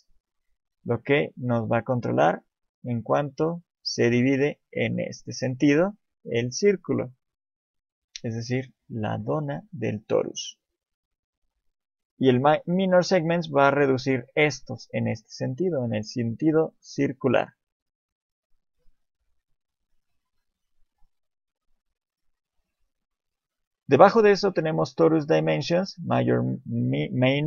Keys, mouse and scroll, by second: 0.4 click, 6.7 click, 10.9 click, 16.6 click, 19.7 middle click, 20.5 alt+middle click, 21.2 alt+middle click, 21.2 scroll down 1, 21.3 middle click.